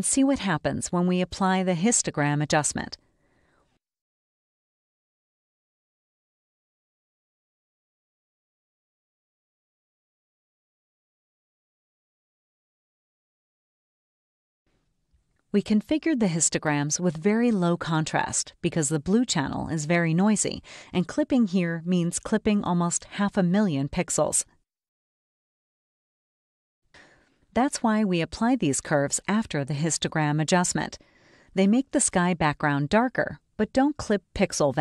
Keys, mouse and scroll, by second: 0.3 click, 2.3 right click, 3.8 click, 6.8 click, 9.5 click, 13.2 click, 15.8 click, 16.7 click, 21.3-25.4 drag, 26.4 click, 28.9 click, 30.5 click.